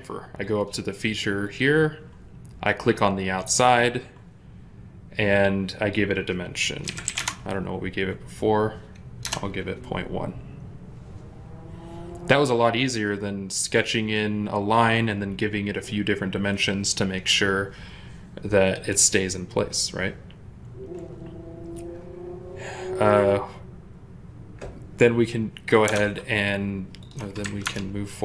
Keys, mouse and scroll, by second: 6.7-7.1 typing, 7.0 Return, 9.1 Return, 25.8 alt+Tab, 26.9 alt+click, 27.5 ctrl+Tab.